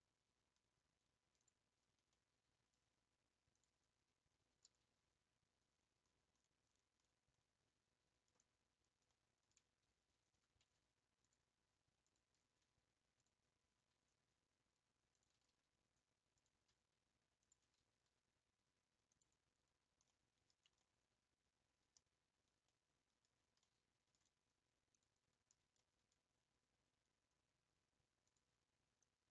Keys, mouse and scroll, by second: 2.1-3.5 middle drag, 3.5 click, 4.5 g, 4.7 g, 9.1-10.3 middle drag, 10.3 1, 11.2 alt+click, 12.0 alt+click, 13.2 click, 13.9 r, 15.3 g, 15.8 g, 17.4 alt+click, 18.1 r, 18.3 r, 19.6-20.1 scroll down 2, 20.1 middle click, 20.5 Tab, 20.8-23.3 middle drag, 23.3 Tab, 23.7-24.9 middle drag, 24.9 click, 25.6 scroll up 2, 25.8-28.3 shift+middle drag, 28.3 click, 29.0 click.